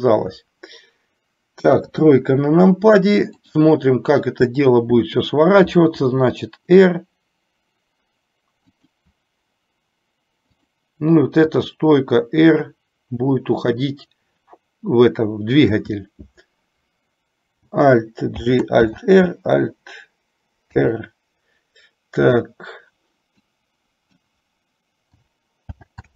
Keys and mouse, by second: 1.8 KP_3, 6.0 r, 10.7 click, 11.7 r, 18.5 alt+g, 19.0 alt+r, 23.5 click, 25.8 alt+g.